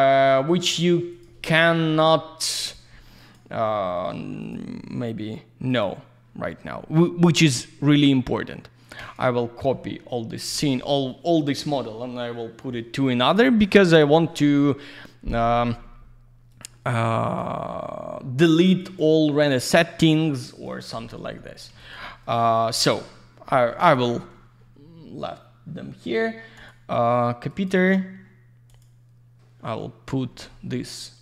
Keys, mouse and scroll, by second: 0.7 middle click, 1.1 click, 1.2 double click, 1.4-1.8 scroll down 1, 2.6 click, 3.2 click, 4.4 right click, 5.7 click, 9.0 click, 16.5 click, 17.3 click, 18.4 click, 18.8 click, 20.0 click, 20.4 click, 20.6 click, 20.8 double click, 21.4 alt+middle click, 21.7 alt+z, 21.8 click, 22.0 middle click, 22.8 click, 23.5 alt+middle click, 23.9 click, 26.5 right click, 27.5 click, 28.7 click.